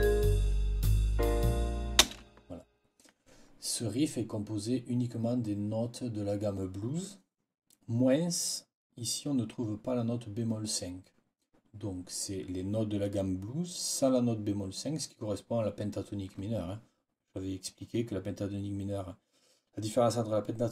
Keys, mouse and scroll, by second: 1.9 space.